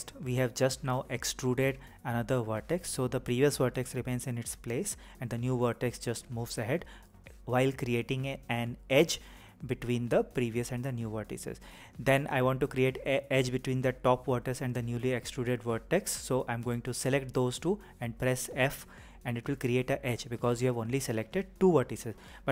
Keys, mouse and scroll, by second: 3.1 click, 10.3 shift+click, 12.4 f, 17.9 shift+click.